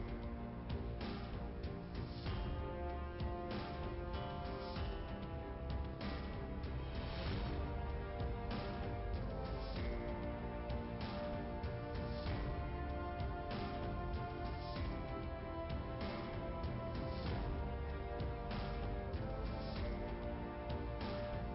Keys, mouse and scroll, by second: 1.3 click, 2.1 click, 3.5 click, 4.8 click, 4.9 click, 6.1 click, 8.0 click, 9.2 click, 10.7 click, 13.0 click, 14.0 click, 16.6 1, 18.6 Return, 20.3 click.